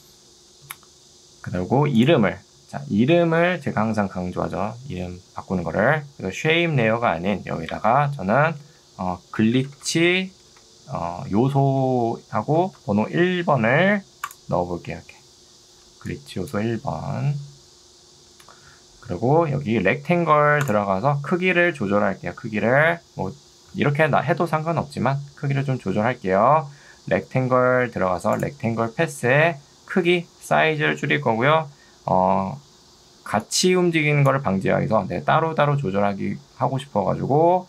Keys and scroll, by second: 7.7 Return, 8.3 d, 8.7 BackSpace, 9.5 r, 11.5-13.6 typing, 15.9 ctrl+2, 18.3 Escape, 33.3 ctrl+2.